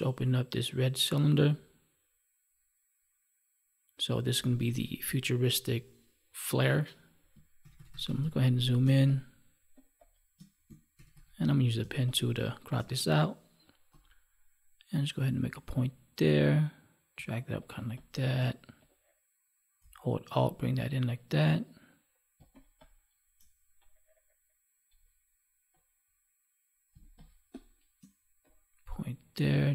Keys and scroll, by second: 7.5 ctrl+=, 8.7 space, 17.0 space, 26.8 space, 29.6 space.